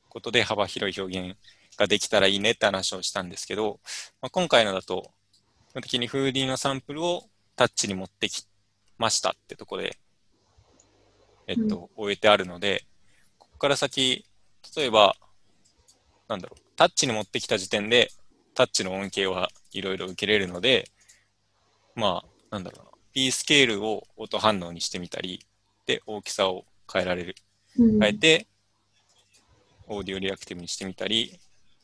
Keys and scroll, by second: 31.3 Tab.